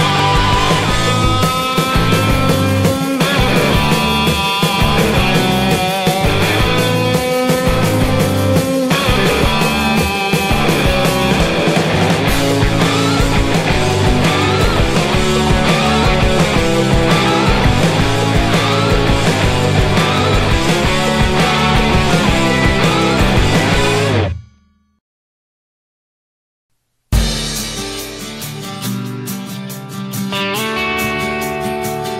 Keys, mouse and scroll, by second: 0.5 shift+d, 0.8 r, 1.5 s, 2.0 s, 3.1 ctrl+l, 3.5 shift+d, 7.1 s, 8.2-10.9 typing, 8.7 ctrl+l, 10.1 Tab, 11.0 Tab, 13.4 Tab, 13.7 a, 13.8 alt+s, 14.5 s, 15.9 s, 16.8 s, 17.4 s, 17.7 a, 17.8 Tab, 20.0 click, 21.1 Tab, 21.7 g, 22.9 a, 23.1 z, 23.4 Tab, 23.4 z, 23.6 Tab, 23.8 shift+s, 24.0 Tab, 26.2 Tab, 26.7 g, 28.7 g, 29.8 Tab.